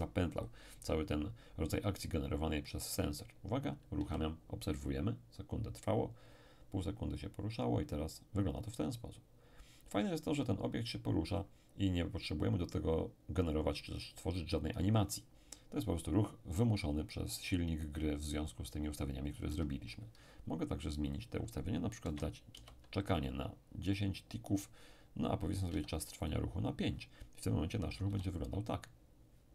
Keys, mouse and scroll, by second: 4.0 p, 19.5 Escape, 21.1 click, 22.0 1, 22.5 0, 23.2 click, 25.7 5, 26.2 click, 28.1 p.